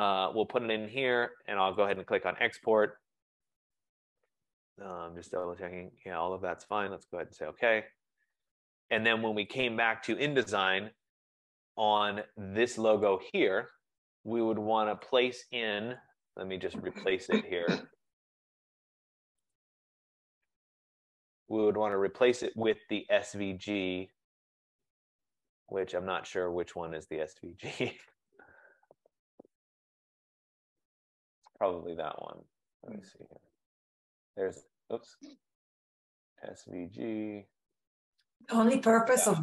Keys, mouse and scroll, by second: 2.0 click, 7.0 click, 9.7 click, 12.4 click, 13.1 click, 15.2 click, 16.2 F15, 19.6 click, 28.4 click, 30.8 click.